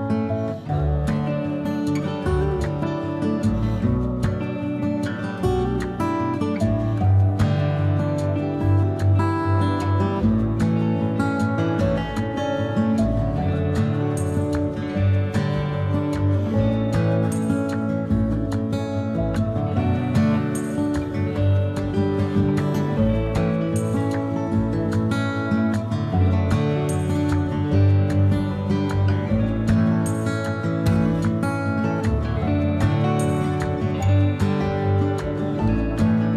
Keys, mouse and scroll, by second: 0.0 shift+n, 4.6 click, 4.7-6.4 middle drag, 5.3 Tab, 6.5-7.7 middle drag, 10.1 ctrl+z, 10.8 Tab, 11.5 a, 11.6-13.1 drag, 12.9 shift+n, 13.6-19.8 drag, 15.3 shift+n, 17.7 Tab, 19.0 Tab, 19.8-20.9 middle drag, 20.9-26.0 drag, 25.0 ctrl+z, 26.0-27.1 middle drag, 27.1-31.0 drag, 29.8 ctrl+z, 31.0-32.5 shift+middle drag, 32.5-34.9 drag, 34.3 ctrl+z, 34.9-36.3 middle drag.